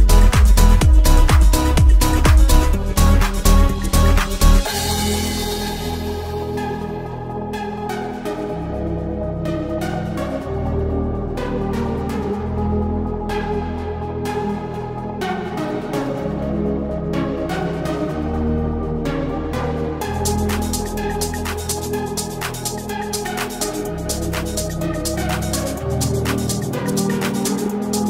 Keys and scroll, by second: 1.7 1, 2.1 0, 26.0 1.